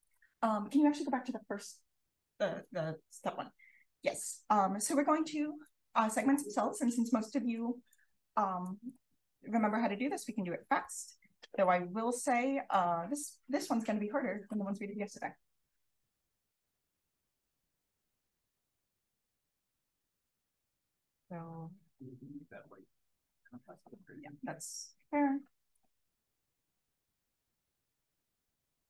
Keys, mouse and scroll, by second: 0.0 click, 4.2-4.9 scroll up 2, 4.9 scroll up 1, 5.5-6.2 drag, 6.5-6.8 drag, 7.5-7.8 drag, 8.5 click, 11.6-13.3 drag, 16.3-16.6 drag, 16.8-17.1 drag, 18.5-18.9 drag, 19.2 click, 19.7-20.3 scroll up 1, 20.3-23.1 scroll up 1, 23.1-24.8 scroll up 1, 24.8-25.4 scroll up 1, 25.4 scroll up 1, 25.7 click, 26.8 click, 27.3 click.